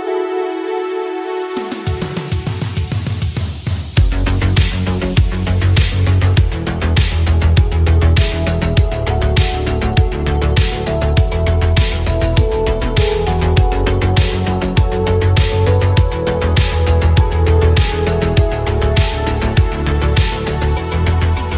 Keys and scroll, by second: 0.5 ctrl+z, 3.4 ctrl+z, 3.8 space, 18.6 ctrl+z, 20.2 ctrl+z.